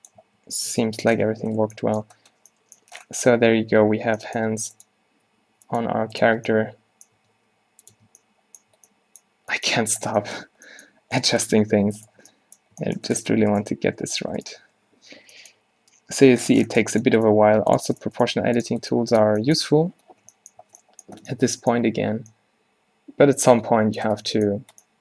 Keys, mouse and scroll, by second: 0.3 Tab, 0.8 Tab, 1.4 a, 3.4 Tab, 3.6 a, 4.5 r, 5.3 s, 5.9 g, 6.4 Tab, 7.3 Tab, 7.5 r, 8.0 Tab, 8.8 a, 9.9 a, 11.7 Tab, 12.0 Tab, 12.3 Tab, 13.8 g, 15.1 o, 15.7 g, 17.4 g, 18.5 g, 18.8 Tab, 20.3 Tab, 20.7 Tab, 21.3 a.